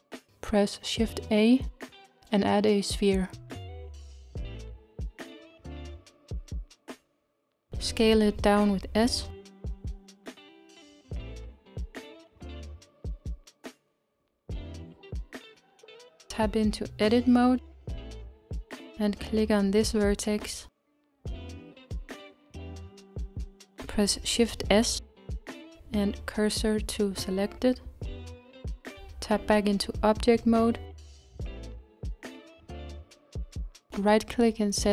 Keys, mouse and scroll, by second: 0.7-2.0 scroll up 2, 2.0 shift+a, 3.6-5.4 middle drag, 6.3-7.1 scroll down 3, 7.1 scroll down 1, 7.3-9.5 middle drag, 9.5 s, 13.3-14.5 shift+middle drag, 14.5-15.4 scroll up 3, 15.4 Tab, 17.5 middle click, 18.3-19.9 scroll up 1, 19.9 click, 23.9 shift+s, 30.3 Tab, 32.0-34.9 right drag.